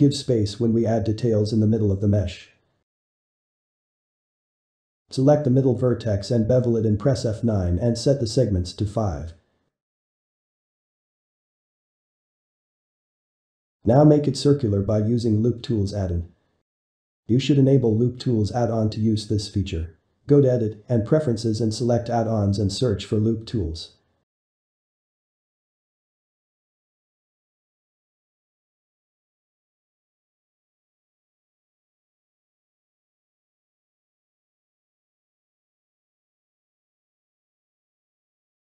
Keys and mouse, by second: 2.4-3.3 shift+middle drag, 3.3 click, 3.9 click, 4.2-4.8 middle drag, 4.8 ctrl+shift+b, 8.3 F9, 9.3 F9, 12.0-13.7 drag, 13.7 shift+middle click, 14.4-25.2 right drag, 25.2-26.7 ctrl+middle drag, 27.2 shift+middle click, 27.7 r, 30.8-38.7 middle drag.